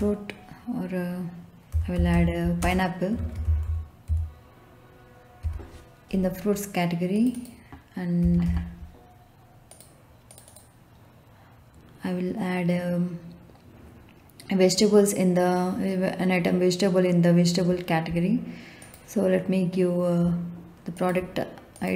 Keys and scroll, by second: 1.4-4.0 typing, 5.4 e, 7.9-8.9 typing.